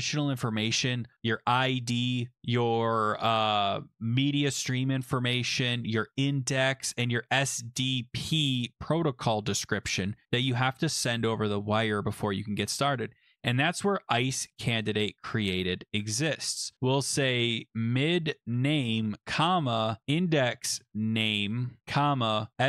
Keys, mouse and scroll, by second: 14.2 click, 14.8 click, 14.9 click, 15.9 Delete, 15.9 Delete, 16.5-22.6 typing.